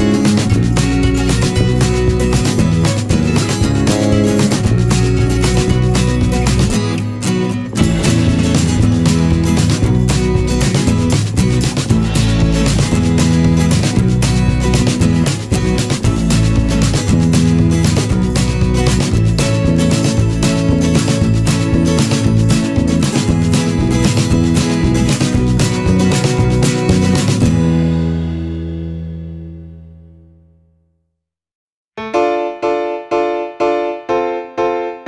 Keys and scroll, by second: 1.1 Return, 7.8 ctrl+z, 14.4 ctrl+-, 14.7 ctrl+0, 15.4 ctrl+=, 15.7 ctrl+space, 16.1 ctrl+=, 18.3 ctrl+z.